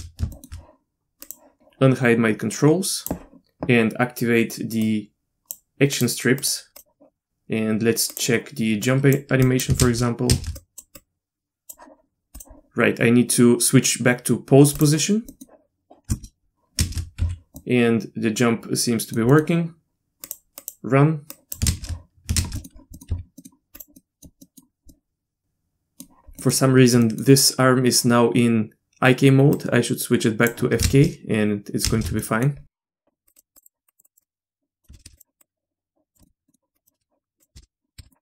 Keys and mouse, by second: 0.3 shift+middle click, 1.6-3.1 drag, 4.8-5.6 drag, 5.9 click, 6.4 click, 6.7 click, 8.1 click, 8.8 drag, 9.5 click, 9.8 shift+space, 10.3 shift+space, 10.6 click, 11.0 click, 12.4 click, 14.8 click, 15.3 middle click, 16.9 shift+space, 17.2 z, 17.6-19.1 middle drag, 19.3 middle click, 20.3 click, 20.6 click, 21.3 click, 21.7 shift+space, 22.4 shift+space, 22.6 middle click, 22.9 middle click, 23.1 z, 23.4 middle click, 23.8-24.5 drag, 24.5 middle click, 24.9-26.0 middle drag, 26.4 middle click, 27.0 middle click, 29.6 click, 31.8 shift+space, 32.2 middle drag, 33.2 drag, 33.3 click, 33.5 click, 33.9 click, 34.0 click, 34.6 drag, 35.1 shift+space, 35.4-36.1 drag, 36.2 middle click, 36.5 middle click, 36.7 click, 37.5 shift+space, 38.0 shift+space.